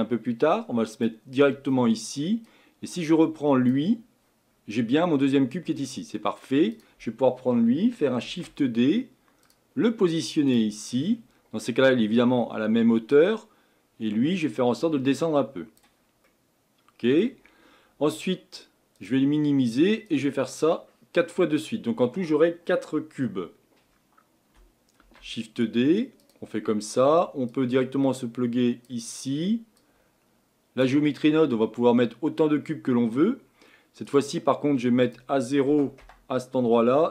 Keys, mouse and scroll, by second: 3.7 click, 8.2 shift+d, 13.5-16.2 drag, 16.2-25.0 middle drag, 25.0 shift+d, 28.9 click, 30.8 click, 36.0-37.1 drag.